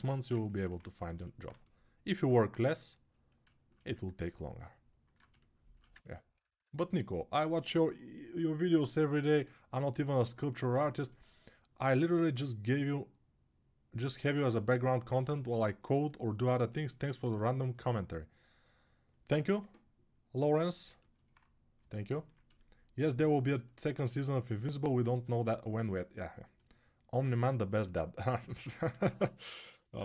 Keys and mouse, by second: 0.1-2.3 ctrl+drag, 6.2-16.7 alt+shift+right drag, 16.7-24.9 alt+drag, 24.9-29.6 ctrl+alt+right drag, 28.7 alt+q.